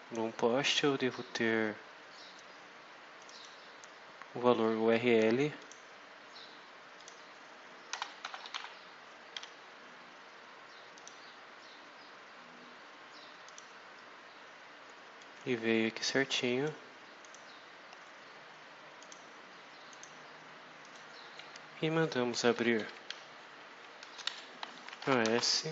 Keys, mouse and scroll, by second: 0.6-0.9 scroll up 2, 3.1 click, 5.5 click, 6.9 click, 7.6-8.9 typing, 9.3 F5, 10.8 click, 13.3 click, 15.1-16.7 drag, 17.1 click, 18.9 click, 19.8 click, 20.7 click, 21.1-21.7 scroll down 4, 22.4 Down, 22.9 Home, 23.9-25.7 typing.